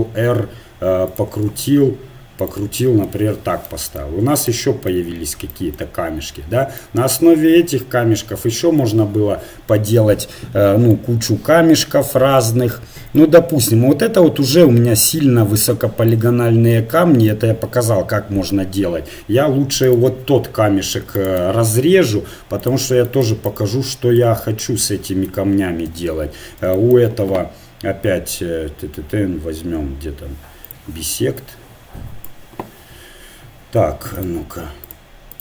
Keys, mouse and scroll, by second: 1.5 g, 3.4 Tab, 7.0-8.9 middle drag, 11.5-17.9 middle drag, 19.9-24.9 right drag, 22.0 Delete, 24.2 click, 25.3 Tab, 25.8 KP_1, 30.7-32.8 drag, 34.2-35.4 drag.